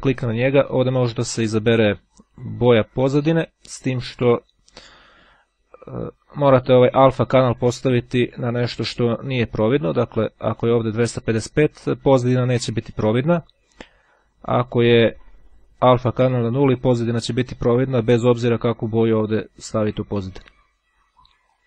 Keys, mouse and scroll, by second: 1.6-2.9 drag, 3.9-5.2 drag, 6.8 click, 8.0-9.4 drag, 13.4-15.7 drag, 17.4-20.4 drag, 21.4-21.6 drag.